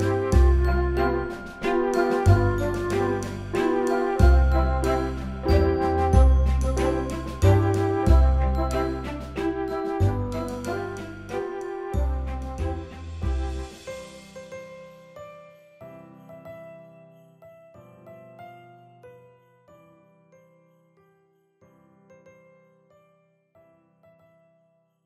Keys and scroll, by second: 4.1-5.9 typing, 7.7 ctrl+0.